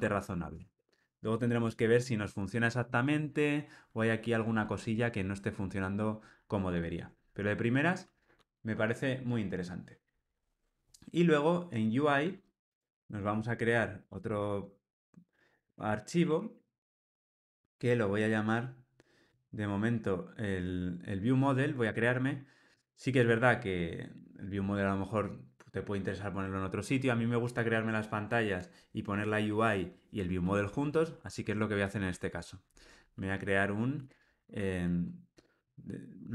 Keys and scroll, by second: 12.7 super+n.